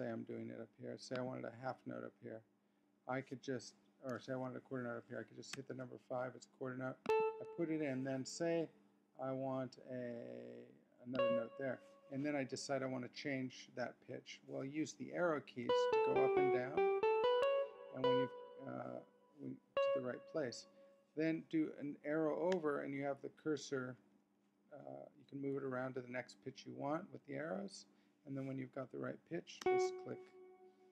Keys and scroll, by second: 6.1 5, 15.7 Down, 16.7 Up, 18.0 Down, 19.7 Up, 22.5 Right, 23.5 Down, 24.8 Up, 25.5 Down, 29.6 Return.